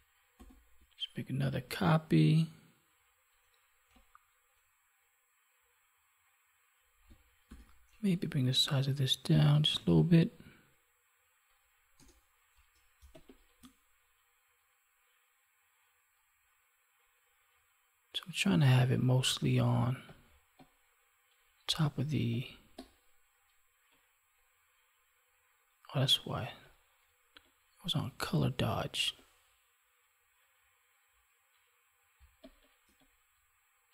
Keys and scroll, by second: 0.3 ctrl+j, 7.4 ctrl+t, 13.0 space, 32.1 space.